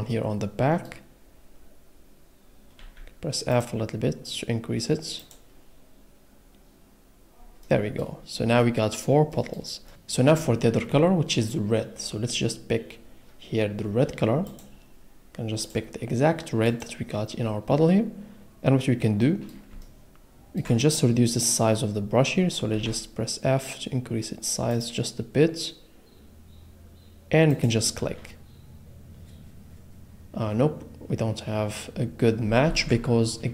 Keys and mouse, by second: 2.8 f, 3.5 click, 6.8 click, 7.6 middle click, 8.6 middle click, 9.9 middle click, 14.4-14.8 drag, 19.8 ctrl+middle click, 22.7 f, 24.7 click, 33.1 ctrl+z.